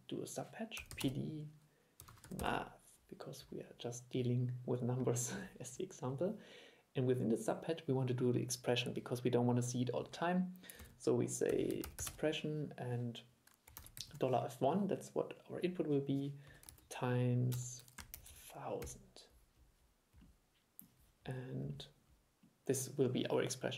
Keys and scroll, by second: 10.9 super+1.